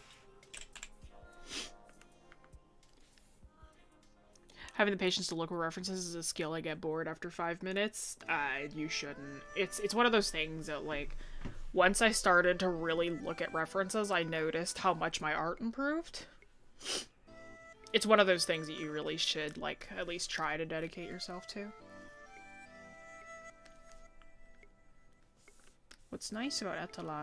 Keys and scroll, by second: 7.3 ctrl+s, 7.7 ctrl+-.